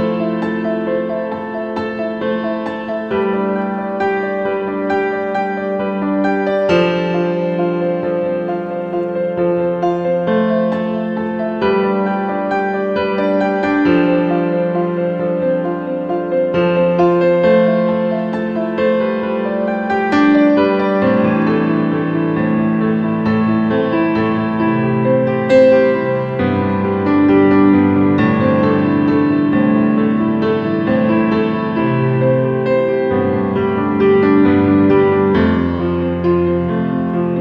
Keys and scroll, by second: 2.6 ctrl+v, 3.3 ctrl+a, 30.4 ctrl+a.